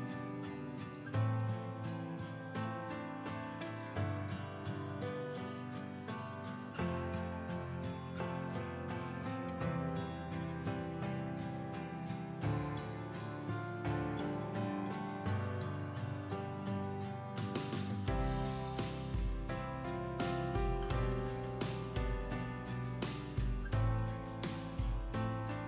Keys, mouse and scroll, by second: 3.5 scroll up 1, 4.0 click, 7.0 scroll down 1, 7.4 click, 15.7 click.